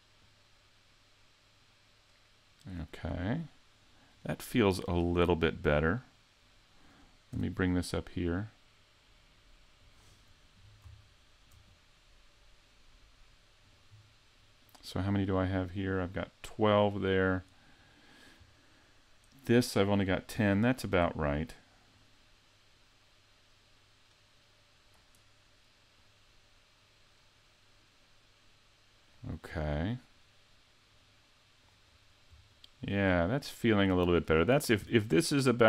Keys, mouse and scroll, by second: 0.2 click, 3.2 scroll down 3, 4.1 right click, 7.3 g, 9.9 click, 10.3-10.8 scroll up 4, 11.0 shift+middle click, 13.6 right click, 15.5 right click, 17.3 right click, 21.9 click, 26.0 click, 31.0 click, 31.9-32.5 scroll down 3, 32.5 shift+middle click, 33.7 right click, 34.8 g.